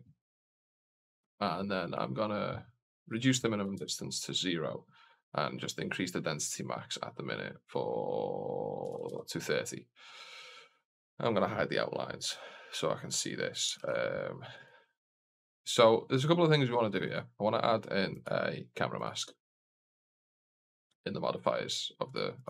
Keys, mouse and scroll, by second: 0.8-1.8 scroll up 2, 2.9-4.6 drag, 5.0-9.8 drag, 10.7 click, 13.6 shift+f, 16.9 click, 18.0-18.9 drag, 19.7 click, 21.9 click, 22.2 click.